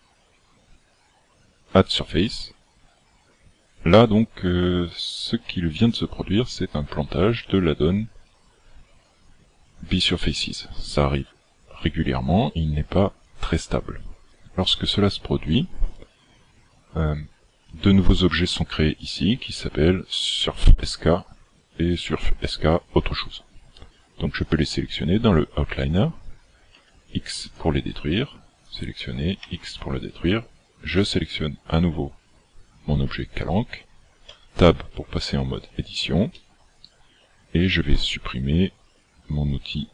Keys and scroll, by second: 26.7 x, 29.3 x, 34.3 Tab.